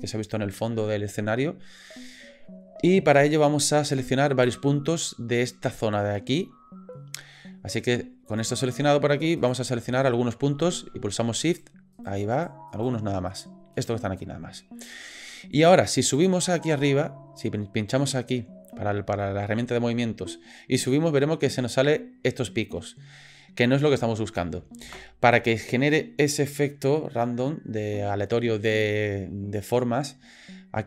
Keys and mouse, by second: 8.3 click, 9.4 click, 11.5 shift+click, 11.9 shift+click, 12.3 shift+click, 12.7 shift+click, 13.3 shift+click, 13.7 shift+click, 14.9 middle click, 15.3 click, 16.2 click, 20.9-24.4 drag, 24.8 ctrl+z.